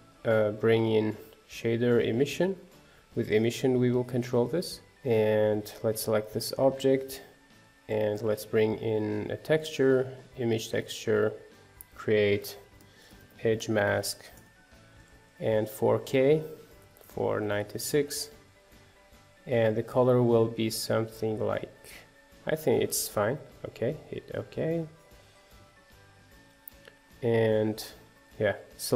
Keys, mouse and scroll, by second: 0.1 click, 1.9 shift+a, 4.9-6.0 scroll down 1, 6.0 click, 10.1 shift+a, 13.9-20.0 drag, 25.7 z, 26.7 click, 27.6 click.